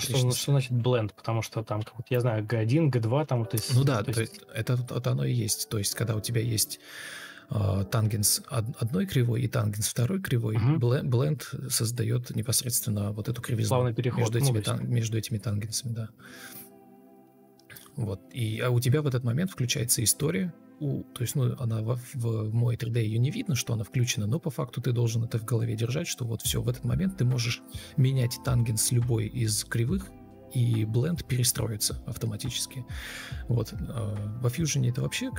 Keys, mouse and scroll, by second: 0.8 ctrl+shift+o, 2.9 Escape, 11.4 ctrl+space, 12.3 Delete, 12.5 space, 15.0 ctrl+space, 15.5 ctrl+space, 22.1 F4, 30.4 ctrl+space, 31.1 ctrl+space.